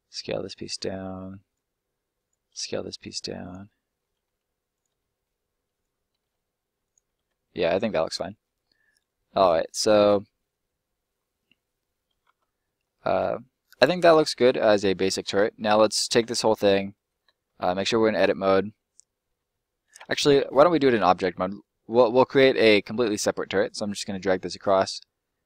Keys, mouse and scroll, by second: 0.5 click, 0.9 middle click, 1.4 right click, 2.5 s, 3.3 click, 3.6 middle click, 4.2 s, 4.6 click, 5.0 middle click, 5.7 right click, 6.2 s, 6.8 click, 7.4 middle click, 8.0 scroll down 1, 8.2 middle click, 8.6 scroll down 1, 8.8 middle click, 12.6 middle click, 12.8 scroll up 1, 13.0 scroll down 1, 13.2 middle click, 14.2 scroll down 1, 14.5 middle click, 15.6 middle click, 16.0 a, 20.9 middle click, 23.6 click, 25.1 shift+click.